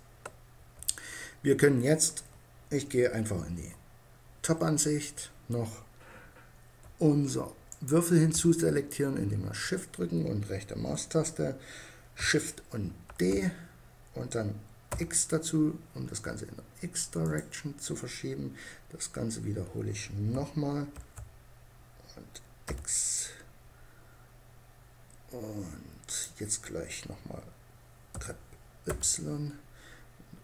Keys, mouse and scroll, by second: 0.0 Escape, 2.9 KP_7, 7.1-8.8 right drag, 9.1-12.5 middle drag, 12.5 shift+d, 18.3 middle click, 20.4 shift+d, 25.7-27.4 drag, 27.6 g, 30.1 click.